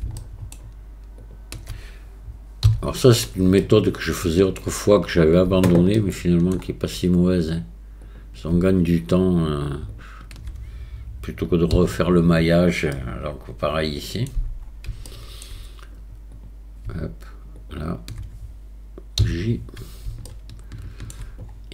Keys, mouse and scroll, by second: 0.2 shift+middle click, 1.3 shift+click, 3.7 shift+middle click, 6.0 shift+middle click, 8.1 click, 9.9 shift+click, 12.9-14.3 middle drag, 15.1 shift+middle click, 16.4 click, 17.7 shift+click, 20.3 shift+click, 20.8 shift+middle click.